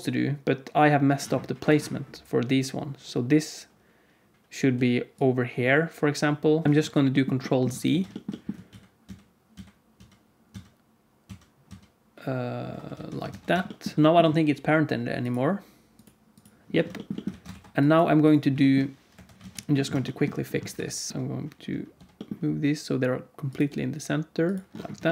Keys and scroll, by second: 4.6 d, 6.5 d, 6.6 d, 7.8 alt+z, 8.6 ctrl+z, 9.0 ctrl+z, 9.5 ctrl+z, 9.9 ctrl+z, 10.4 ctrl+z, 11.5 ctrl+z, 11.6 ctrl+z, 12.9 alt+a, 13.3 ctrl+s, 17.2 alt+a, 17.5 ctrl+s, 19.0 KP_1, 19.3 alt+z, 20.7 Tab, 21.0 Tab, 21.1 g, 21.9 g, 23.6 g.